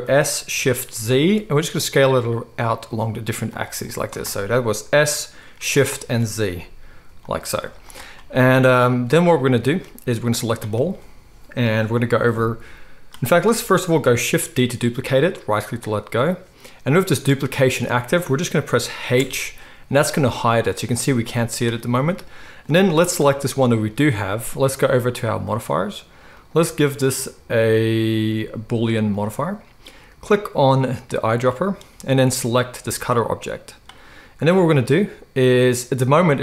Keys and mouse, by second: 0.0 s, 5.0 s, 7.6 z, 7.9 middle click, 8.2-14.2 middle drag, 14.2 shift+click, 14.8-23.0 shift+middle drag, 14.8 shift+d, 19.2 h, 23.0 click, 23.1-26.4 middle drag, 26.4-31.2 drag, 31.2-36.4 middle drag.